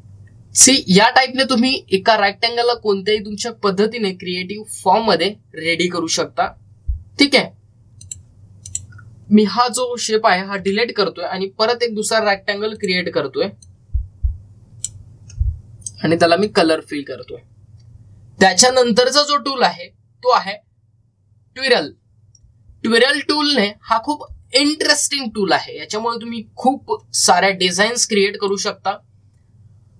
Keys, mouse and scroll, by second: 0.4-0.8 scroll down 1, 8.9 click, 13.6-17.3 drag, 19.5-29.5 drag.